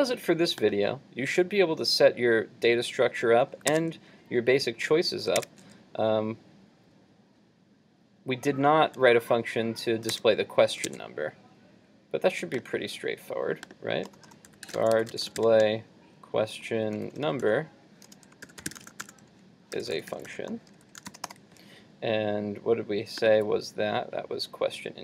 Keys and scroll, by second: 4.4 super+Tab, 10.2 super+Tab, 10.9 super+Tab.